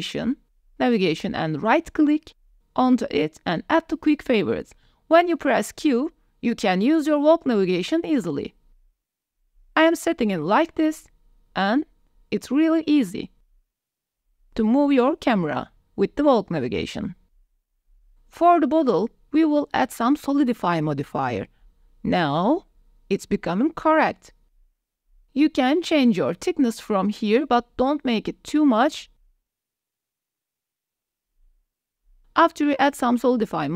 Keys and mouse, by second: 2.3-4.4 right drag, 5.0 q, 6.7-15.6 typing, 16.8 click, 17.1 g, 17.2 x, 17.4 s, 17.7 click, 19.7-21.6 drag, 22.6 click, 22.9 middle click, 23.9 middle click, 27.8-29.7 middle drag, 29.9-31.1 middle drag, 30.7 KP_0, 31.7 click, 32.6 KP_0, 33.0 click, 33.6 ctrl+s.